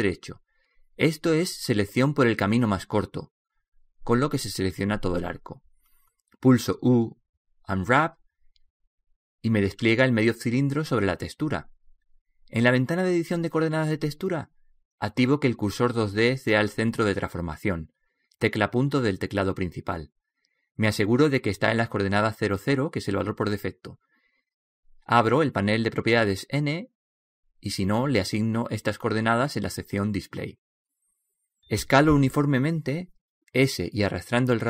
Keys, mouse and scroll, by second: 0.2 right click, 7.5 u, 12.9-22.9 drag.